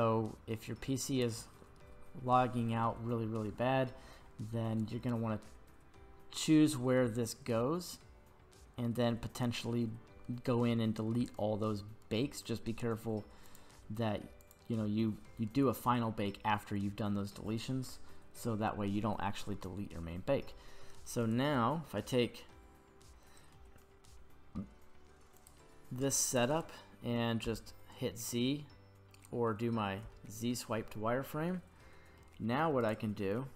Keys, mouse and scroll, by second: 20.5-21.0 middle drag, 21.2 right click, 25.4-25.8 scroll up 2, 26.5 right click, 27.5 z, 30.0 z, 31.5-32.2 middle drag, 32.8 right click.